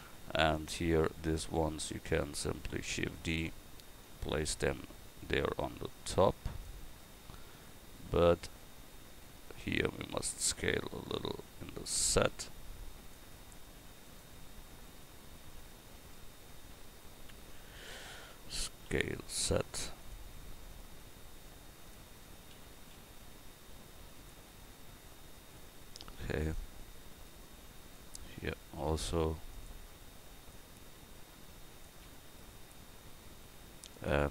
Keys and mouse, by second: 0.5-3.2 right drag, 3.0 shift+d, 10.1 s, 14.1-18.9 right drag, 18.9 s, 21.0-24.2 drag, 25.1-29.5 drag, 27.3-28.5 right drag, 30.4-32.5 drag, 32.5 s.